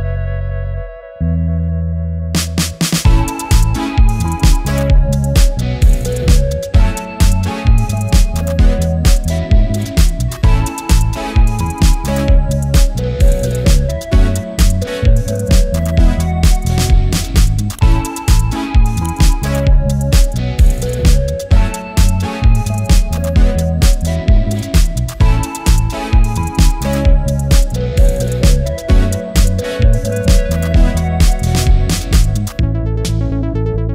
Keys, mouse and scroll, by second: 0.1 click, 3.9 typing, 3.9 click, 5.5 Return, 6.9 right click, 7.9 click, 13.6 click, 13.6 typing, 14.1 ctrl+t, 15.2-19.9 drag, 16.1 typing, 17.3 typing, 19.9 Return, 20.6-22.0 drag, 21.3 typing, 22.0 ctrl+t, 22.6-25.1 drag, 25.1 Return, 28.0-33.8 drag, 28.0 typing, 33.8 typing.